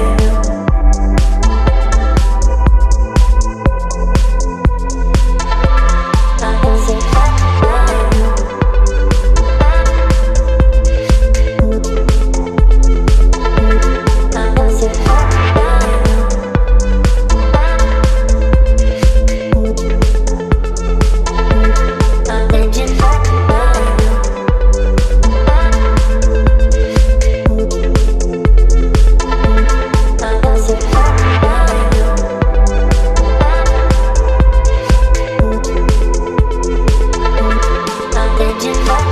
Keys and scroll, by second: 2.3 space, 3.7 ctrl+j, 8.5 space, 14.1 x, 14.5 Delete, 23.1 space, 36.9-38.6 typing.